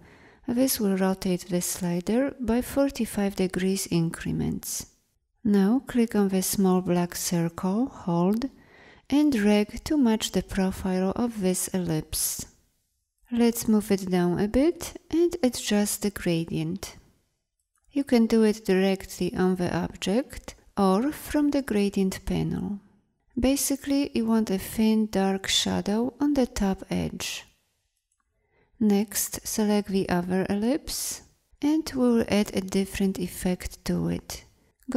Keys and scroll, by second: 29.6 v.